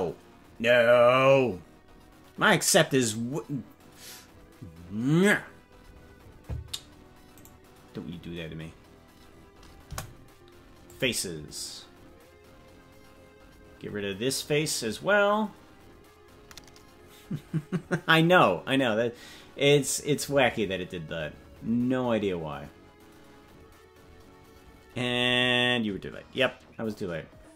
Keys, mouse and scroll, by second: 9.9 Delete.